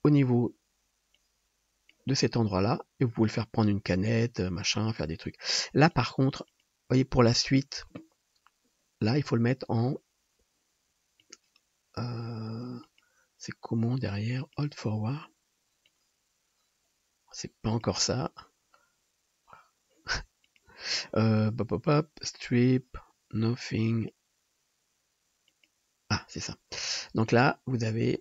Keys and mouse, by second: 0.4-1.6 middle drag, 4.8-6.1 middle drag, 6.5 middle click, 11.2 middle click, 12.8-14.6 middle drag, 20.7-21.9 drag, 22.0-23.9 drag.